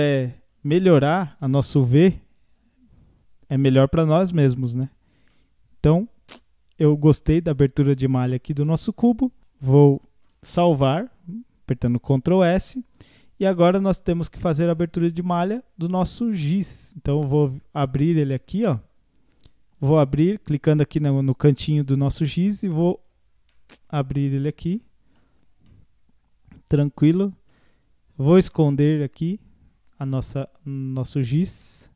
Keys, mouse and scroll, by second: 0.9 scroll up 4, 1.8 Tab, 2.2 scroll up 2, 3.1 scroll up 3, 4.1 scroll down 2, 4.8 Tab, 5.0 scroll down 2, 5.3-7.9 middle drag, 9.4 Tab, 9.6 Tab, 10.6 ctrl+s, 14.0 click, 18.3 click, 19.8 click, 21.7 click, 23.0 click, 23.5-24.4 middle drag, 24.4 click, 24.7-25.2 middle drag, 25.2 scroll up 4, 25.7-30.9 middle drag, 30.9 click, 31.6-31.9 middle drag.